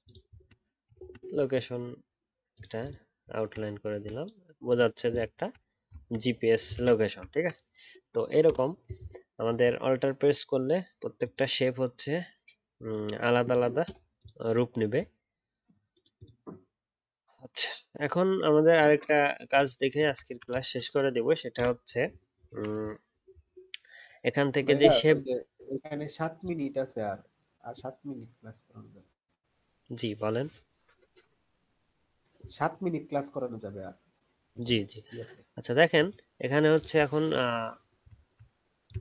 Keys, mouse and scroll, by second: 0.3 alt+scroll down 1, 0.9-3.3 alt+scroll down 1, 3.3-4.8 alt+scroll up 3, 5.3-5.9 alt+scroll down 1, 5.9-6.4 alt+scroll down 1, 6.7 alt+scroll, 6.8 ctrl+click, 7.3 alt+scroll up 2, 20.2-20.8 alt+scroll down 1.